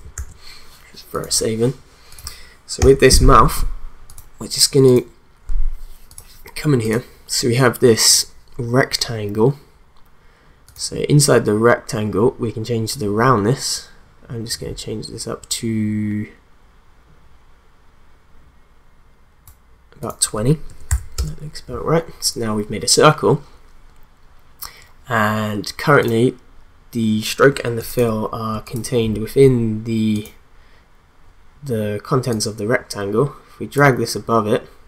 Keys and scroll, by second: 0.2 ctrl+s, 2.8 u, 20.4-21.4 typing.